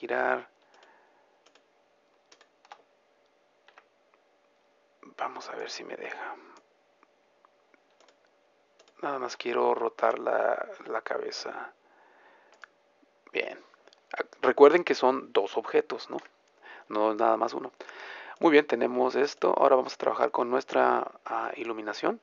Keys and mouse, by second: 4.0 a, 8.8-10.3 right drag, 10.1 r, 13.0-16.3 middle drag, 16.3 a, 17.0-18.5 middle drag, 18.5-19.8 drag, 19.8 middle click, 21.1 middle click, 21.5-22.2 drag.